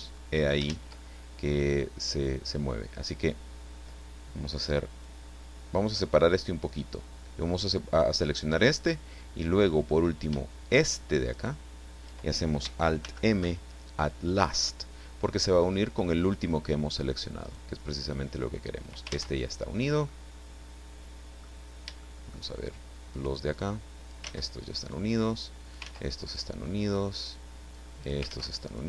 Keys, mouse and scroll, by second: 0.6 ctrl+z, 5.0-6.8 drag, 11.3 shift+right click, 13.0 alt+m, 15.4 click, 17.4 right click, 18.1 click, 19.1 ctrl+z, 19.5-19.8 ctrl+scroll down 3, 20.1-21.6 middle drag, 21.8 shift+scroll up 2, 22.0-22.5 shift+middle drag, 23.6 click, 24.2 ctrl+z, 24.8 ctrl+right click, 25.3 click, 25.8 ctrl+z, 26.2 ctrl+right click, 26.9 click, 27.7 click, 28.3 ctrl+z, 28.6 ctrl+right click.